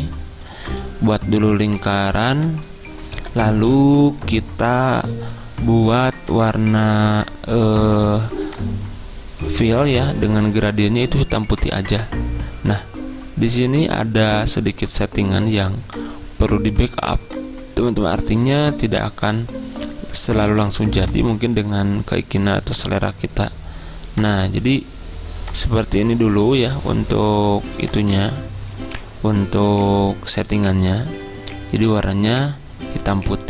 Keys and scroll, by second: 29.8 ctrl+z.